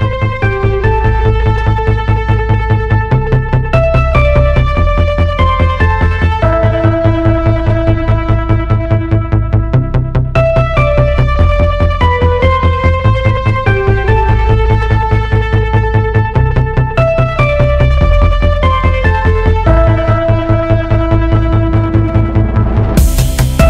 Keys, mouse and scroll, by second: 15.1 e.